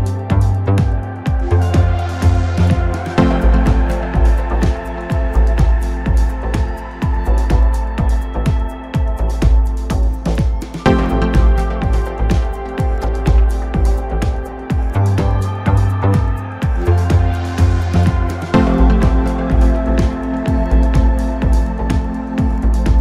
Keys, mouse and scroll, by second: 0.8-2.1 scroll up 1, 2.1 click, 2.8 scroll up 3, 3.0-3.5 scroll down 4, 3.5 s, 4.1 scroll up 2, 4.3 s, 5.6 KP_1, 6.0-6.4 scroll up 1, 6.4 s, 8.1 g, 9.6 KP_7, 10.0-10.7 scroll up 1, 10.7 s, 11.7 scroll down 2, 12.0-12.4 middle drag, 12.4-13.1 scroll up 3, 13.1 KP_7, 13.6-14.0 scroll down 3, 14.0 shift+middle click, 14.4-14.7 scroll up 2, 14.7 KP_1, 15.7-22.5 drag, 22.5-23.0 scroll up 3.